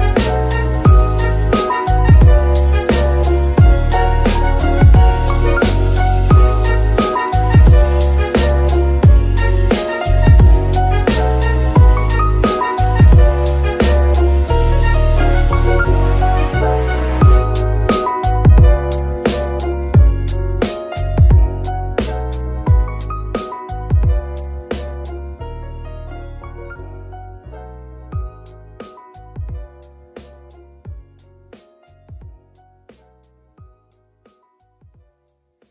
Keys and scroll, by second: 4.6 KP_Divide, 8.0 shift+g, 8.6 Escape, 11.2 shift+KP_3, 15.5 g, 15.9 Tab, 16.5 shift+s, 17.8 Tab, 18.3 s, 20.8 shift+g, 21.0 y, 33.9 shift+KP_3, 35.0 g, 35.5 Escape.